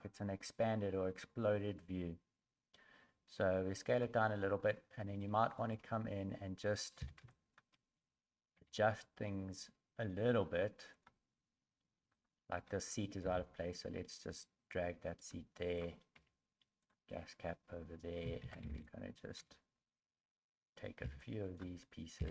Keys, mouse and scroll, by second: 4.7 scroll up 3, 5.2 shift+middle click, 7.0 b, 8.6 g, 12.2 right click, 13.2 g, 15.8 right click, 16.2 g, 18.2 a, 18.4 a, 18.8 b, 21.0 b, 22.2 b.